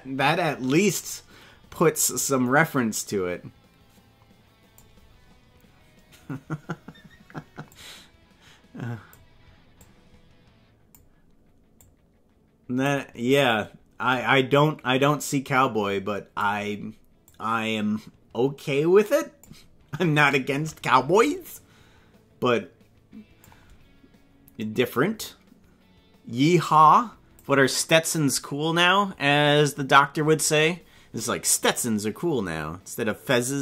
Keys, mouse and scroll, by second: 0.9 right click, 2.1-4.9 drag, 7.7-9.2 drag, 9.8-10.9 drag, 11.9-12.9 drag, 13.4 right click, 14.5-16.5 drag, 17.2-19.5 drag, 20.2 right click, 21.5-23.5 drag, 25.1-27.4 drag.